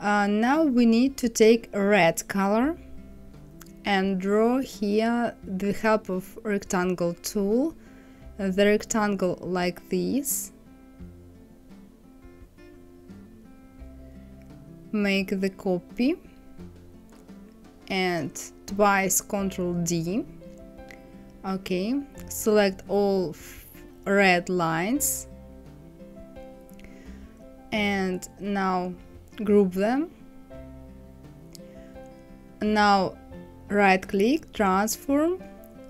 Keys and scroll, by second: 18.3 ctrl+d, 19.1 ctrl+d.